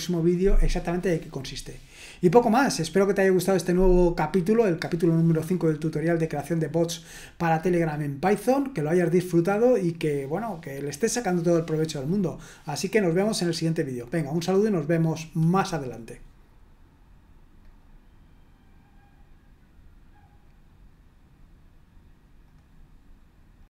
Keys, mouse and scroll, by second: 17.6 click, 22.4 click, 23.6 click.